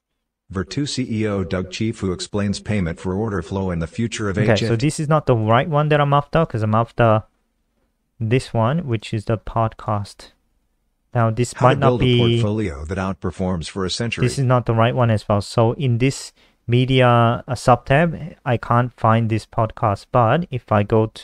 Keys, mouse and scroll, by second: 4.8 click, 6.5 click, 8.9 super+w, 9.7 click, 10.5 Down, 10.7 Down, 11.1 Return, 14.3 click.